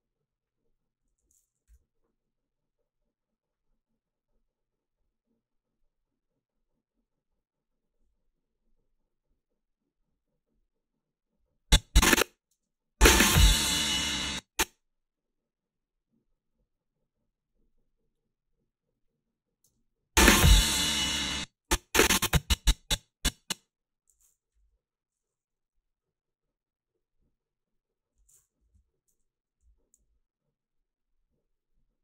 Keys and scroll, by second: 1.7 p, 12.3 a, 12.5 space, 14.1 space, 19.7 space, 21.2 space, 24.6 -, 28.6 =, 29.6 h.